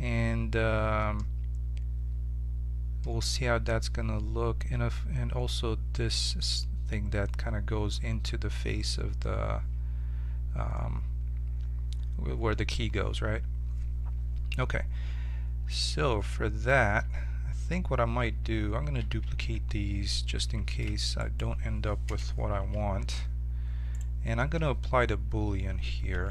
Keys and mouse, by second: 15.7-17.6 middle drag, 17.0 z, 18.9 a, 19.1 a, 20.6 shift+d, 22.0 m, 23.9-26.3 right drag.